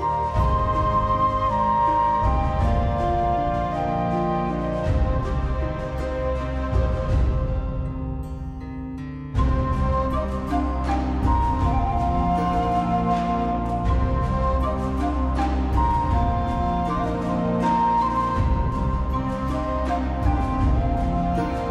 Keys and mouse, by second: 0.0 alt+z, 0.1 middle click, 0.5 alt+middle click, 0.9 middle click, 1.1 alt+middle click, 1.5 alt+click, 1.6 alt+z, 2.5 click, 2.8 click, 3.1 g, 3.7 click, 4.1 click, 4.4 g, 4.4 middle click, 4.6 click, 5.0 click, 5.2 g, 5.4 click, 5.6 click, 5.8 g, 6.1 click, 6.2 alt+middle click, 6.5 alt+z, 6.6 shift+middle click, 6.7 middle click, 7.1 middle click, 7.5 middle click, 7.8 middle click, 8.3 middle click, 8.9 middle click, 9.5 middle click, 10.0 a, 10.1 middle click, 10.2 middle click, 10.4 shift+middle click, 10.7 middle click, 10.9 click, 11.1 middle click, 11.6 alt+z, 11.8 click, 12.0 Tab, 12.1 click, 12.7 alt+z, 13.1 Tab, 13.5 alt+z, 14.1 click, 14.7 middle click, 15.2 alt+click, 15.3 alt+click, 15.5 alt+middle click, 15.6 g, 16.1 click, 16.8 g, 17.1 click, 17.3 shift+middle click, 17.9 g, 18.2 click, 19.0 click, 19.1 g, 19.4 click, 19.5 alt+z, 19.6 middle click, 20.0 alt+middle click, 20.2 alt+middle click, 20.5 shift+middle click, 21.3 middle click.